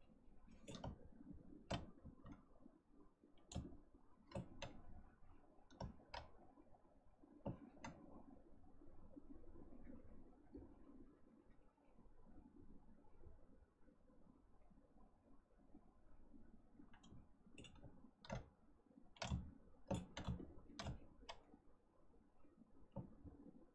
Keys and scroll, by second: 1.9 ctrl+z.